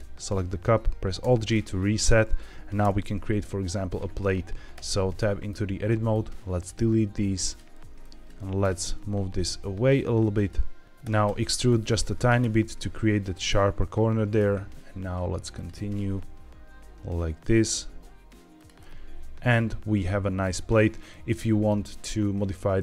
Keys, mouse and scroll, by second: 1.1 alt+g, 2.7 KP_1, 4.2-4.7 scroll up 2, 4.7 Tab, 5.1 shift+middle click, 6.0 click, 7.0 x, 7.9 click, 8.5 g, 8.7 x, 10.2 click, 10.8 ctrl+z, 10.9 e, 11.1 x, 12.1 click, 12.3 e, 13.3 click, 14.3 e, 15.4 click, 15.7 e, 18.5 click, 18.7-20.3 middle drag, 21.0 middle click, 22.7 middle click.